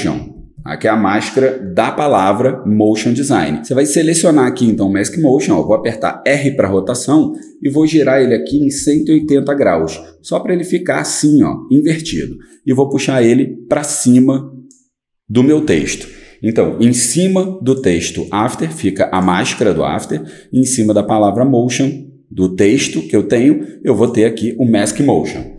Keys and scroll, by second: 0.0-1.0 typing, 5.6 r, 8.2-9.4 typing, 12.1-12.9 typing.